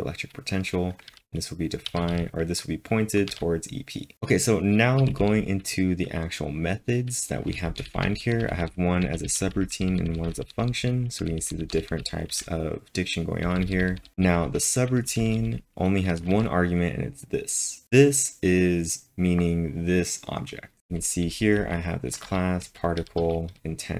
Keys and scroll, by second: 3.3 w, 4.8-5.5 typing, 7.3-13.4 typing, 15.2-16.8 typing, 20.8 typing.